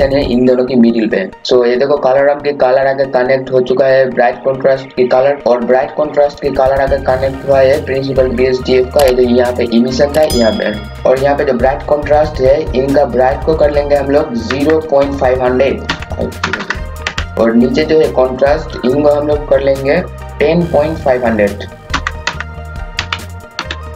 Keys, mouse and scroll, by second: 11.0 scroll up 1, 12.8 click, 14.5 KP_0, 14.8 KP_Decimal, 15.9 KP_5, 16.4 KP_0, 18.9 click, 21.9-23.9 typing.